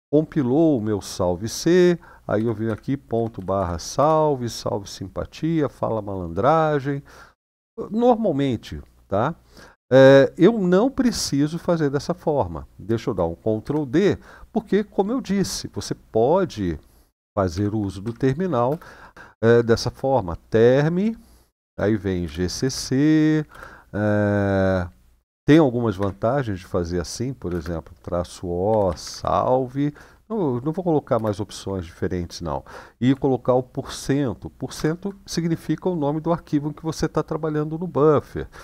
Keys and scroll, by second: 2.1-3.1 typing, 3.3 Tab, 3.7 Return, 13.4 ctrl+d, 17.3 typing, 17.8 Up, 18.5 space, 22.0-23.3 typing, 25.7 typing, 27.2 typing, 28.4-28.9 typing, 30.7-31.5 typing, 34.5 typing.